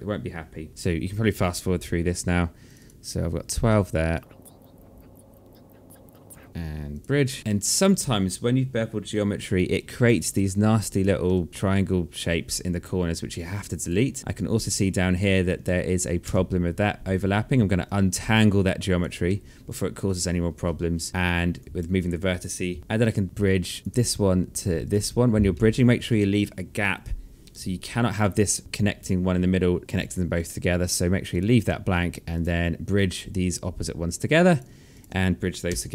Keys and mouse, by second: 0.7 alt+middle click, 2.2 shift+click, 3.7 shift+click, 7.0 alt+middle click, 9.1 right click, 10.5 click, 10.8 Delete, 11.4 click, 13.4 right click, 14.1 alt+middle click, 15.8 w, 17.4 click, 18.8 alt+middle click, 21.1 right click, 24.4 shift+click, 25.0 alt+middle click, 29.5 shift+click, 34.0 click, 34.5 shift+click, 35.2 g.